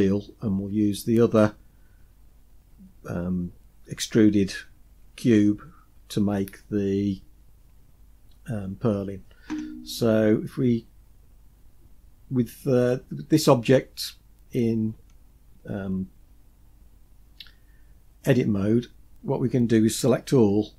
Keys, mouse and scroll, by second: 10.0-10.6 scroll up 4, 11.0 scroll down 1, 20.5 a.